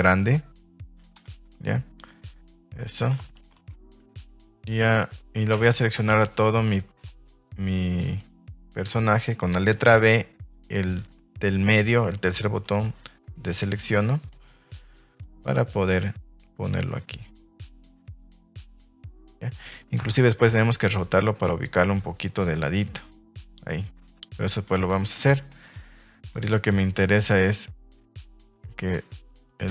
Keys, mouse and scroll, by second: 1.1 a, 5.7 Escape, 6.2 a, 6.3 a, 6.7 b, 9.8 b, 13.4 click, 15.1 click, 20.1 r, 20.4 z, 28.7 s, 29.4 click.